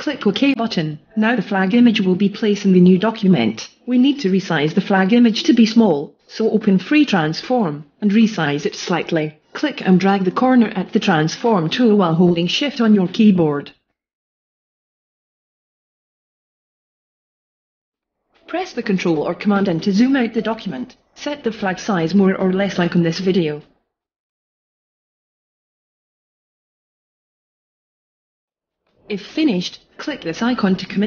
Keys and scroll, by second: 19.4 alt+shift+space, 20.2 alt+space.